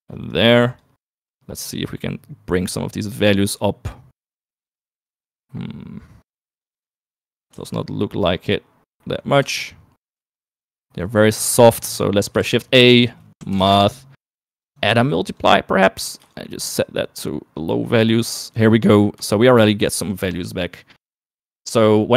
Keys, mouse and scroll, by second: 1.0 click, 2.1 click, 3.5 click, 4.4 click, 5.6-6.7 middle drag, 7.2 click, 7.9 ctrl+x, 8.4 click, 9.7 click, 10.1 ctrl+shift+click, 10.8 click, 12.7 middle click, 13.2 shift+a, 15.5 click, 16.9-19.2 shift+drag, 19.8 shift+middle click, 21.1 middle click.